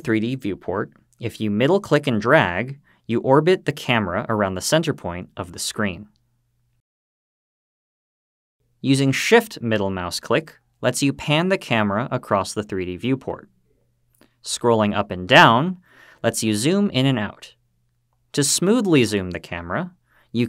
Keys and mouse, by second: 1.9-6.6 middle drag, 9.6-13.3 shift+middle drag.